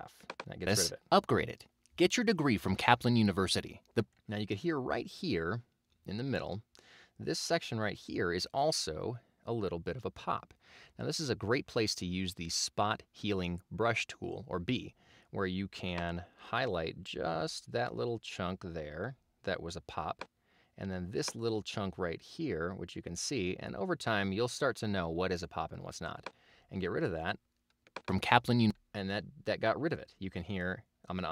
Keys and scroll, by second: 0.7 space, 4.0 space, 28.1 space.